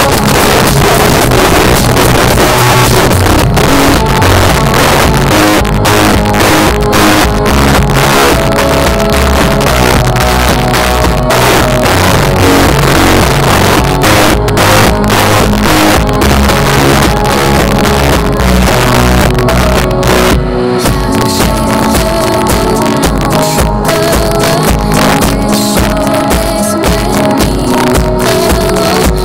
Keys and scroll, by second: 0.1 Up, 0.3 Return, 0.9 typing.